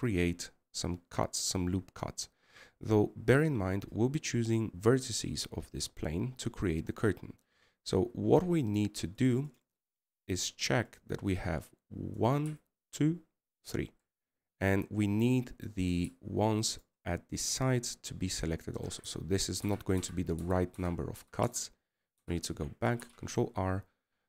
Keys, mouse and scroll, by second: 14.6 right click, 15.3 right click, 18.5 right click, 23.2 7, 24.0 8.